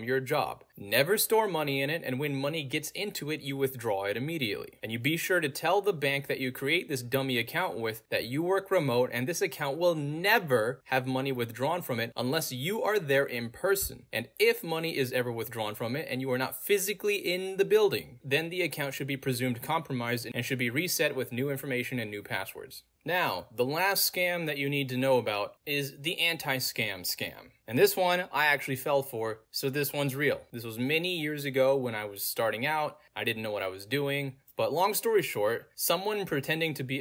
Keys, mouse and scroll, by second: 0.3-1.2 scroll down 1, 1.2-2.9 scroll down 1, 2.9-4.1 scroll down 1, 4.1-4.9 scroll down 1, 5.2 scroll down 2, 6.9-9.3 scroll down 2, 9.3-9.6 scroll down 1, 9.9-10.2 scroll down 2, 10.1 middle click, 11.2 click, 12.0-12.3 scroll down 2, 12.8 click, 14.6 click, 16.0 click, 16.5-18.3 middle drag, 16.5-18.3 scroll down 2, 19.5 click, 21.4 click, 23.3-25.4 middle drag, 23.4-24.7 scroll down 2, 24.7-25.4 scroll down 1, 26.8 middle click, 26.8 scroll down 2, 29.1-33.4 middle drag, 29.1-31.2 scroll down 2, 31.2-33.4 scroll down 1, 35.0 click, 35.9 Return.